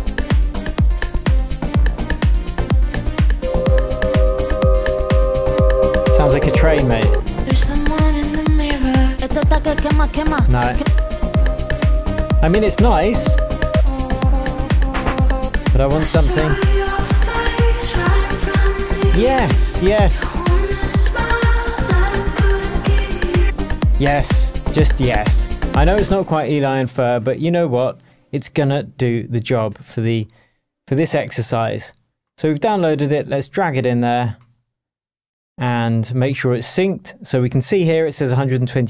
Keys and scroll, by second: 26.0 space.